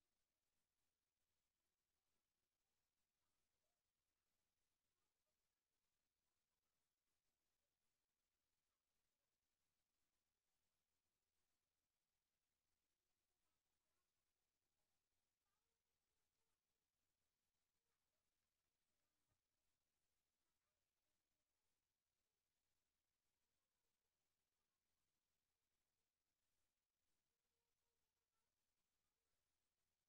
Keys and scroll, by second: 4.7 ctrl+c, 5.3 ctrl+v, 12.0 ctrl+c, 14.4 ctrl+v, 25.4 ctrl+c, 25.9 ctrl+v.